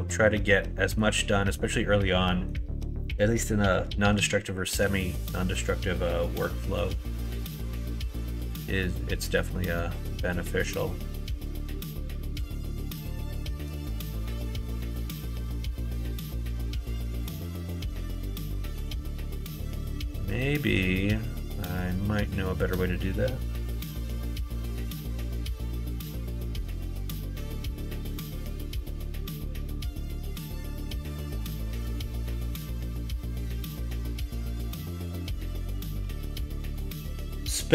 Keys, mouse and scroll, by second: 0.7 middle click, 1.4 middle click, 2.3 middle click, 4.7 middle click, 6.5 middle click, 7.0 shift+middle click, 8.1 shift+middle click, 9.1 middle click, 10.1-13.6 middle drag, 20.3 middle click, 21.6-24.9 middle drag, 30.2 middle click, 32.2 shift+d, 36.0 p.